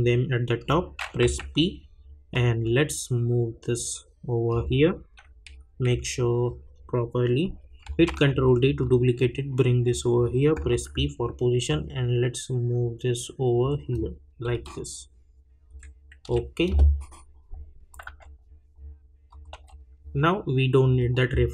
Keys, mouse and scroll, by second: 1.2 p, 2.3-5.4 drag, 5.4 Right, 5.9 Left, 8.0 ctrl+d, 8.8-10.7 drag, 10.7 p, 11.7-14.5 drag, 14.5 Right, 16.2 Left, 17.9 click, 18.0 u, 19.3 click, 19.5 u, 20.8 click.